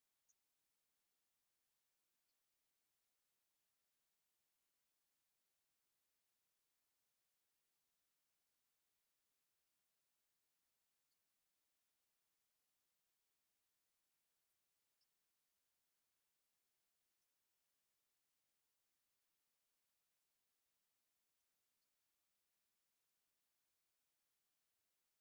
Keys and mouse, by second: 0.5 click, 2.7 right click, 3.5 click, 4.5 click, 5.4 right click, 7.4 click, 7.9 click, 9.9 click, 10.3-12.1 drag, 13.5 click, 15.2-16.9 drag, 17.7-18.8 drag, 19.5-21.5 drag.